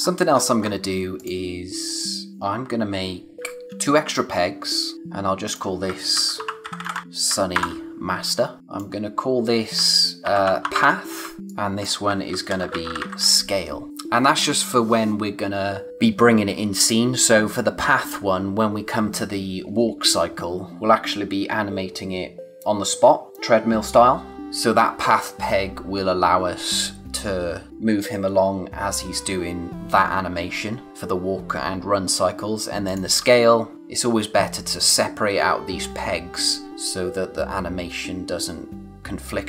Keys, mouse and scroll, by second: 1.2 click, 3.5 click, 3.7 space, 3.8 click, 5.9-7.5 typing, 8.4 click, 10.0-13.9 typing, 11.5 click, 32.8 click.